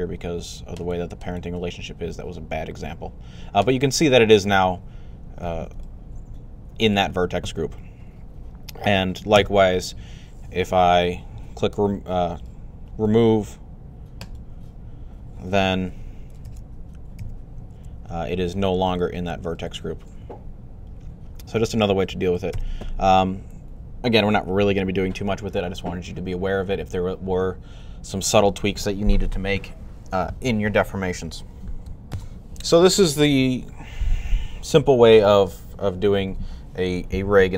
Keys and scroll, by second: 1.4 r.